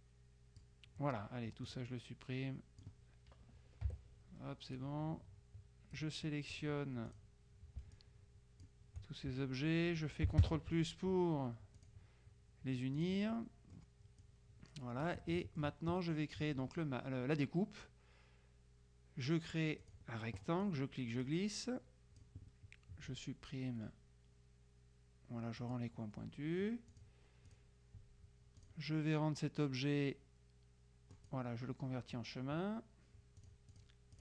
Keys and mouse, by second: 1.7-3.4 drag, 3.9 Delete, 4.9-7.2 drag, 8.0 shift+click, 10.5 ctrl+KP_Add, 11.9 click, 13.1 click, 15.3 click, 19.9 click, 20.7-22.8 drag, 25.7 click, 27.0 click, 28.7 click, 31.3 click, 33.5-34.2 drag.